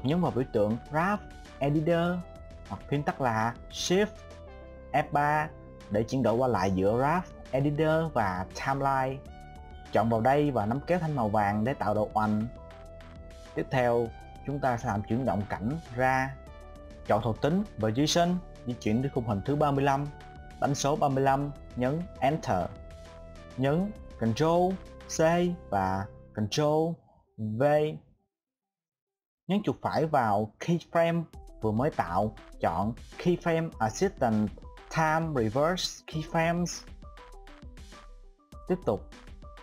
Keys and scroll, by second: 4.4 shift+F3.